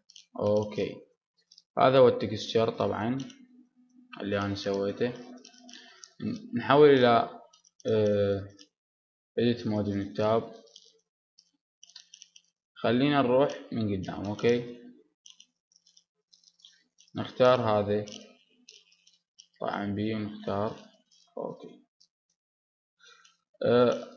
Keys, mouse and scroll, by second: 0.0-4.5 drag, 4.5-9.8 middle drag, 5.9 Tab, 9.8 ctrl+Tab, 10.2-11.8 middle drag, 10.6 a, 12.2-14.1 middle drag, 13.4 KP_3, 14.7 middle click, 16.5 click, 19.8-21.1 drag, 22.1-24.1 middle drag.